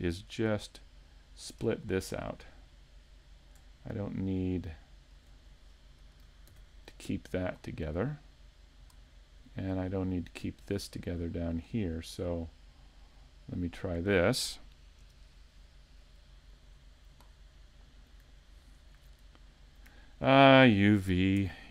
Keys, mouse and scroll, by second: 0.3 shift+right click, 0.8 middle click, 1.8 shift+middle click, 2.2 scroll up 1, 2.9 middle click, 2.9 scroll up 2, 5.0 shift+right click, 5.5-5.9 scroll down 4, 6.0 scroll up 1, 6.5 ctrl+e, 8.1 middle click, 9.1-9.5 scroll down 2, 9.9 shift+middle click, 11.0 scroll down 1, 11.3 middle click, 12.3 middle click, 12.5 shift+middle click, 14.0 right click, 15.0 KP_Decimal, 16.0 middle click, 16.8-17.2 scroll down 2, 17.3-17.8 scroll down 4, 17.7 middle click, 18.8 ctrl+right click, 19.3 middle click, 20.5 ctrl+right click, 21.4 ctrl+e.